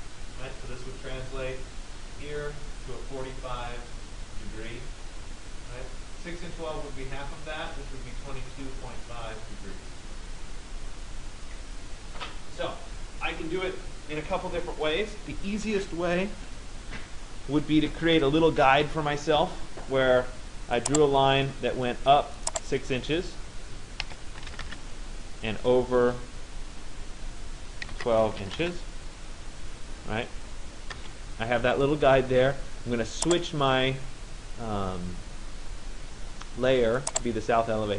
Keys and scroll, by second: 23.7 6, 24.7 Return, 28.0 2, 28.6 Return.